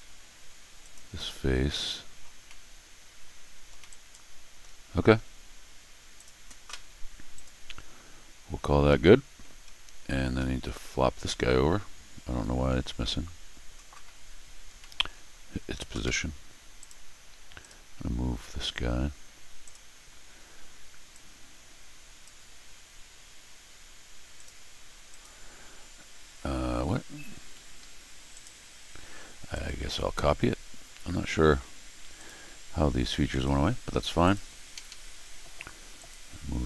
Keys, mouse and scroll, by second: 0.8 click, 2.4-3.6 middle drag, 3.8 middle click, 3.9 right click, 6.1 click, 7.3 click, 8.9 scroll down 1, 9.0 middle click, 9.6 scroll down 1, 10.2 scroll up 1, 10.4 middle click, 14.8 middle click, 16.8 click, 17.6 click, 19.6 click, 21.1-22.2 drag, 24.3 click, 25.1 click, 27.8 Escape, 28.3 right click, 29.5 click, 32.1 click, 33.3 click, 34.2 click, 34.7 Escape, 34.9 Escape, 35.9 click.